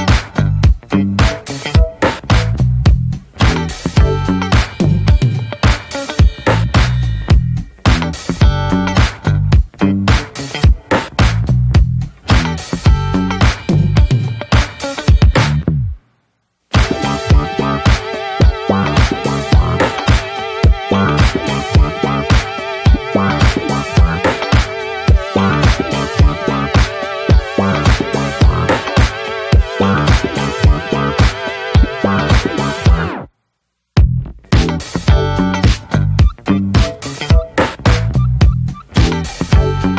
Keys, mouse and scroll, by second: 0.3 ctrl+s, 0.4-0.8 scroll down 1, 0.8-1.5 middle drag, 1.5 ctrl+s, 1.8 shift+middle click, 2.0 click, 2.3 scroll up 2, 2.5-2.9 middle drag, 2.9-5.1 drag, 5.1 /, 5.9 scroll down 2, 6.0 middle click, 6.9 /, 7.3-8.5 middle drag, 8.5-8.9 scroll up 1, 8.9 middle click, 9.2 /, 9.8 /, 10.2-10.7 middle drag, 10.7 /, 11.1-11.5 drag, 11.5 Tab, 11.7 click, 11.9 scroll down 2, 12.1 middle click, 12.3 Tab, 12.8 3, 12.9-13.2 drag, 13.2 middle drag, 13.5-13.8 drag, 13.8-14.5 middle drag, 14.5 i, 15.6 middle click, 15.9 x, 16.8-17.5 middle drag, 17.5 Tab, 17.6 click, 17.9 ctrl+a, 18.4-18.8 middle drag, 18.8 drag, 19.0 scroll up 1, 19.3-21.3 middle drag, 21.3 i, 23.2 2, 23.2-24.0 drag, 24.0 middle click, 24.4-25.5 alt+shift+drag, 25.5 scroll down 1, 25.7 middle click, 26.2 right click, 26.7 a, 27.1 right click, 27.8 middle click, 28.5 Tab, 28.7-29.2 middle drag, 29.2 ctrl+s, 29.3 click, 29.7 /, 30.1 middle click, 30.5 ctrl+s, 30.5-31.6 drag, 31.6 middle click, 32.0 /, 32.3-32.7 middle drag, 32.7 Tab, 32.9-33.3 drag, 33.3 Tab, 33.6 click, 34.3 /, 34.5-35.4 middle drag, 35.4 click, 35.7 /, 36.1 middle click, 36.2 Tab, 36.4 click, 36.6-37.2 scroll down 2, 37.2 3, 37.3-37.7 drag, 37.7-38.1 middle drag, 38.1 shift+drag, 38.3 scroll up 1, 38.5-39.1 middle drag, 39.1 i.